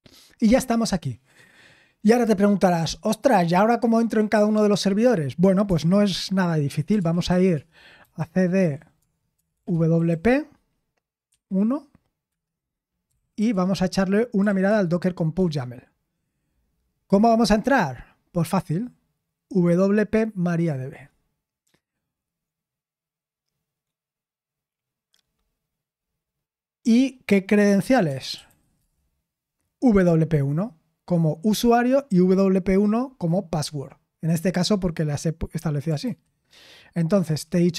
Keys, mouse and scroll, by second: 5.6 super+7, 6.5-14.6 typing, 14.6 Tab, 15.3 Return, 28.3-29.1 typing, 36.0 super+8.